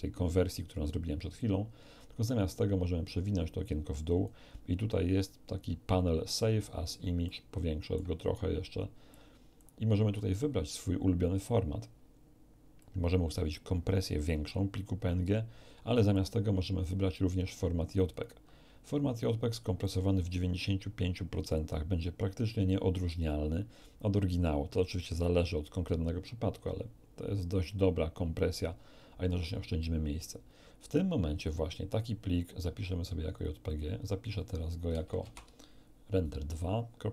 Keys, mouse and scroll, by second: 1.9-4.4 drag, 7.2 ctrl+middle click, 9.1 click, 10.0-10.3 scroll down 1, 12.8-14.7 drag, 16.1 click, 18.1 click, 19.8-21.7 drag, 33.3 click, 35.2 Right, 35.3 2.